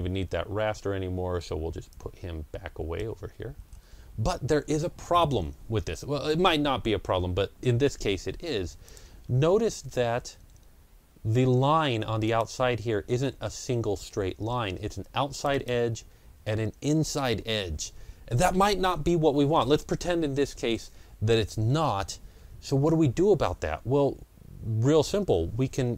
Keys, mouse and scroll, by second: 0.7 ctrl+scroll down 1, 1.2-1.5 ctrl+scroll down 1, 1.8-4.1 drag, 3.5 ctrl+scroll up 1, 4.1 ctrl+scroll down 1, 5.8-11.4 middle drag, 8.7 click, 12.1 click, 12.1-13.2 middle drag, 13.2 scroll up 1, 13.9 ctrl+scroll up 1, 15.2 click, 15.4 double click, 16.4 ctrl+scroll down 1, 17.0-17.4 ctrl+scroll up 1, 25.8 ctrl+scroll down 1.